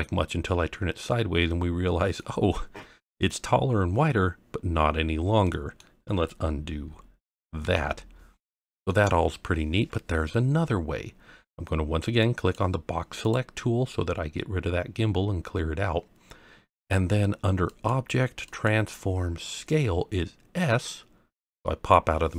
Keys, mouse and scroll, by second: 2.5-5.4 scroll down 1, 5.4-5.8 middle drag, 7.6 ctrl+z, 8.4-8.9 middle drag, 12.2 click, 13.2 click, 17.7-21.6 drag.